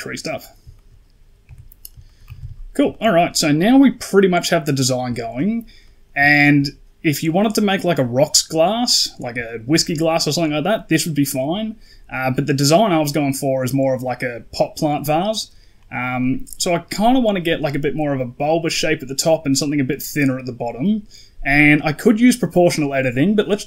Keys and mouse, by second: 0.2 middle click, 0.6 shift+middle click, 1.3 Tab, 1.9 shift+middle drag, 2.1 a, 2.3 a, 2.8 shift+middle drag, 3.5 middle drag, 4.7 middle drag, 5.1 shift+middle drag, 5.7 middle drag, 6.2 shift+middle drag, 9.3 shift+middle drag, 16.1 middle click.